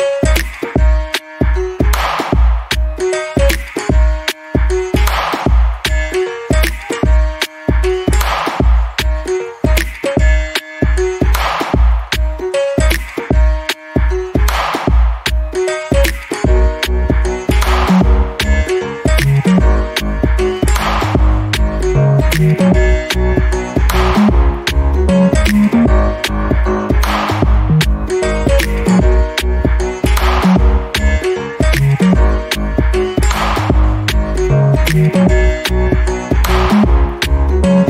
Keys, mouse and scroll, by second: 0.2-0.5 scroll up 1, 0.5 alt+click, 1.4 alt+middle click, 1.8 alt+click, 2.6 alt+middle click, 2.9 alt+click, 4.7 middle click, 5.6-6.4 scroll up 1, 8.3 click, 9.1 right click, 9.7 click, 11.2 right click, 12.7 click, 13.2 double click, 14.2 click, 15.9 Escape, 16.3-16.8 scroll down 1, 16.8 alt+middle click, 17.3-17.8 scroll up 1, 18.2 click, 18.8 alt+middle click, 21.5 right click, 22.0 click, 23.4-23.9 scroll up 1, 23.9-25.1 scroll down 1, 25.4 click, 28.0 right click, 33.1 click, 35.4 scroll up 1, 36.4 click.